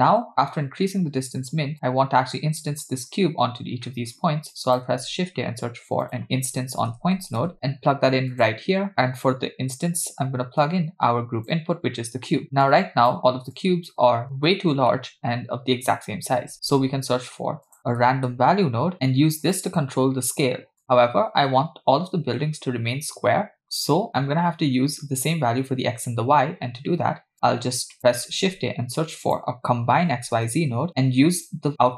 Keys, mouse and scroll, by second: 0.7-1.7 scroll down 4, 1.7-3.0 drag, 3.9 middle click, 4.6 click, 5.0 shift+a, 10.6-11.6 drag, 12.7 click, 13.5-14.0 drag, 14.9 middle click, 15.8-16.4 scroll up 2, 16.5 shift+a, 20.8 click, 23.8 click, 26.6-27.3 scroll down 1, 27.3 scroll down 1, 27.3 click, 27.8 click, 28.3 shift+a, 31.4 click.